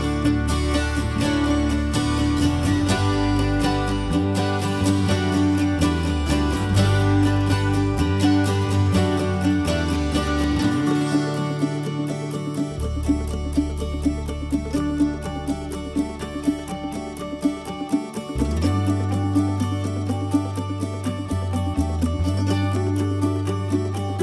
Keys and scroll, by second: 2.6 ctrl+c, 2.7 ctrl+v, 7.0 ctrl+x, 7.4 ctrl+alt+v, 12.3 ctrl+x, 12.7 ctrl+alt+v, 13.2 ctrl+z, 13.9 ctrl+x, 14.4 ctrl+alt+v, 14.9 ctrl+s, 16.6 ctrl+z, 17.4 ctrl+g, 19.8 ctrl+z.